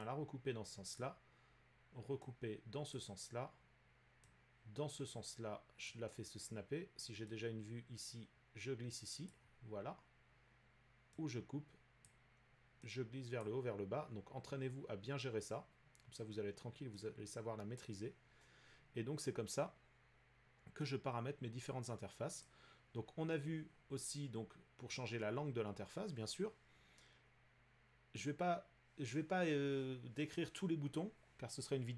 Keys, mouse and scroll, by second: 1.0 click, 2.9 click, 5.8 click, 9.3 click, 12.0 click, 13.4 click, 17.1 click, 17.5-21.2 drag, 21.3 click, 21.5-27.5 drag.